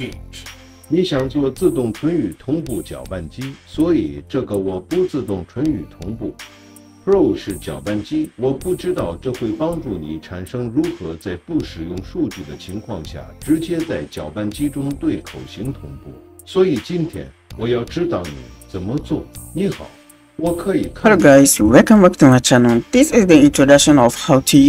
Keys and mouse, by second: 0.7 space.